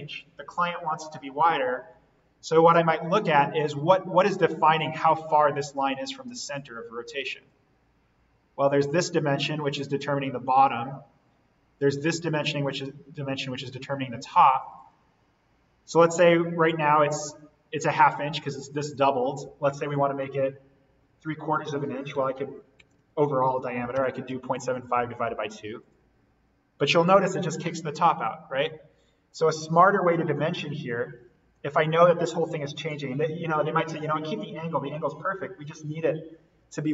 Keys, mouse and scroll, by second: 2.1-2.7 scroll down 1, 2.7 scroll up 1, 7.4-13.2 drag, 13.3-14.6 scroll down 1, 14.6 click, 22.1-23.9 typing, 25.1 2, 25.8 click, 29.5 click, 29.9 ctrl+z, 31.5 click, 35.9 Delete.